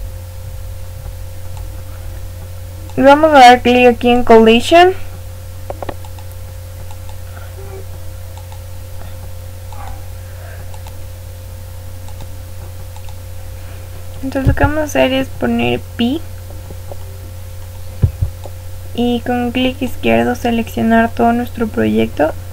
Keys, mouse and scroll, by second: 1.5 click, 4.1 click, 6.0-10.1 drag, 12.9 click, 14.4 b, 17.9 b, 21.0-22.5 middle drag.